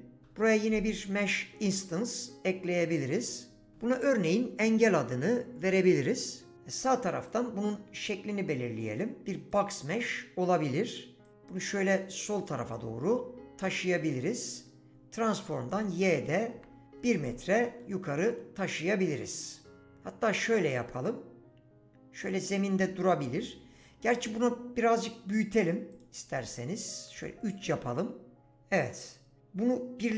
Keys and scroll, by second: 0.2 h, 16.5 1, 16.8 Return, 27.2 3, 27.6 Return.